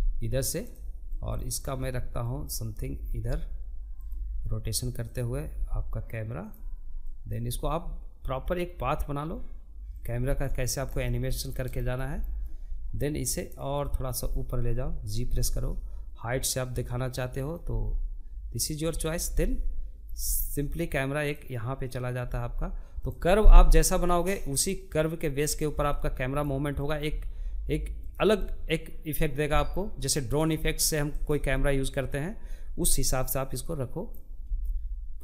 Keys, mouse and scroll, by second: 0.8 click, 1.4 g, 3.5 click, 4.0 g, 5.7 click, 5.8 g, 8.7-9.9 middle drag, 9.9 scroll down 1, 10.2-12.2 shift+middle drag, 12.2 click, 13.8 g, 15.9 click, 16.1 g, 17.6 click, 17.8 middle click, 18.6 g, 20.6 click, 20.6 g, 21.7 scroll up 1, 21.8-24.0 middle drag, 24.0 click, 24.2 g, 25.4 click, 25.5 g, 26.8-29.7 middle drag, 29.7 click, 29.9-32.5 middle drag, 32.5 click, 32.8 g, 34.4 click, 34.6 g.